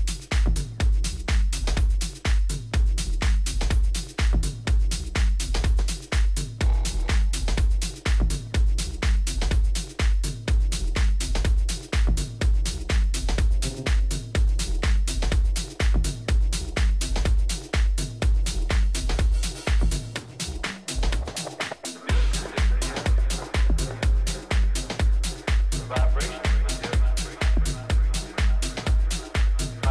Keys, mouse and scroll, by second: 0.4 Tab, 1.5 right click, 2.1 Tab, 2.6 a, 3.1 a, 3.9 middle click, 4.9 Tab, 5.9 z, 7.1 Tab, 8.2 a, 8.9-10.5 middle drag, 15.0 Tab, 16.3-18.2 drag, 19.3-22.7 middle drag, 24.9 n, 25.8-27.7 middle drag, 26.7 a, 27.0 a, 27.3 a, 28.3-29.9 drag.